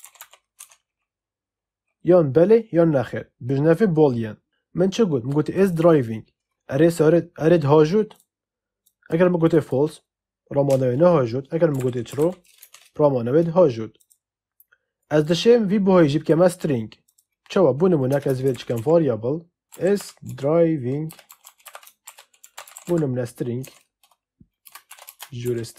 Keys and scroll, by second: 0.0-0.6 typing, 11.4-12.6 typing, 18.0 Return, 18.4-23.3 typing, 23.5 Escape, 24.5-25.7 typing.